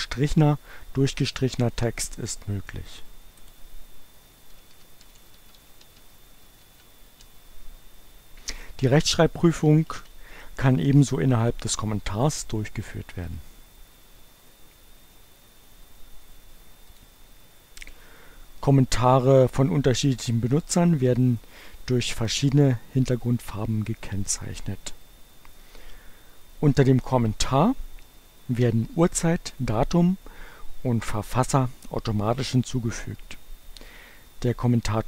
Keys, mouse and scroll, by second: 3.4 click, 4.0-7.3 typing, 10.0 ctrl+a, 13.4 right click, 16.8 click.